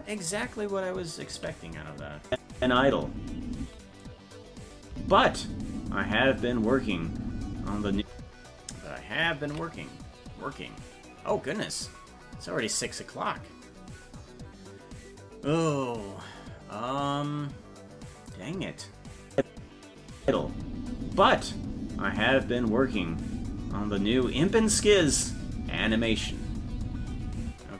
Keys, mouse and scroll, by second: 1.7 ctrl+s, 2.3 click, 2.5 space, 4.9 space, 8.6 space, 9.8 ctrl+s, 19.3 click, 20.2 space, 27.5 space.